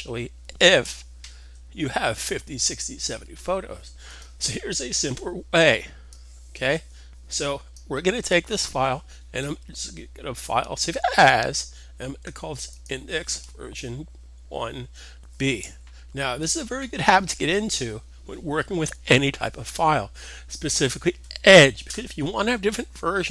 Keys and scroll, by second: 15.1 b.